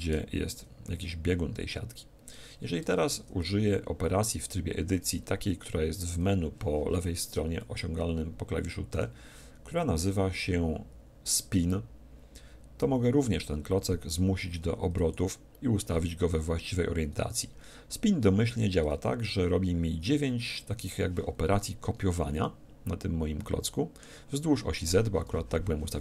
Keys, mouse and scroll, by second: 2.8 Tab, 4.0 Tab, 5.6 Tab, 7.5-9.4 middle drag, 9.9-11.3 scroll down 1, 11.3 middle click, 14.9-16.7 drag, 19.3-21.3 middle drag, 22.4-24.3 middle drag.